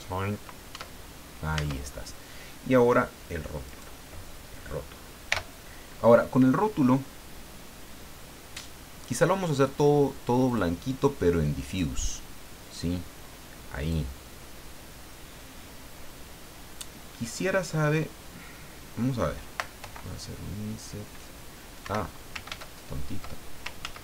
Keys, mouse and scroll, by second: 0.7 Tab, 1.5 Tab, 3.6 right click, 5.3 l, 10.4 click, 11.6 click, 13.8 click, 19.8 i, 21.8 Escape, 23.8 ctrl+z.